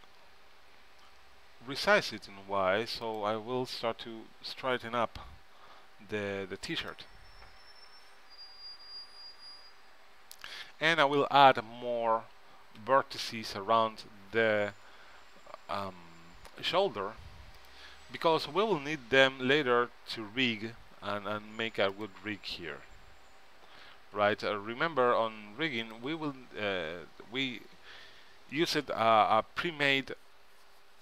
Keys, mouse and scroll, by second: 0.1 s, 3.9 g, 8.7 g, 10.4 g, 12.9 e, 18.4 s, 24.3 g.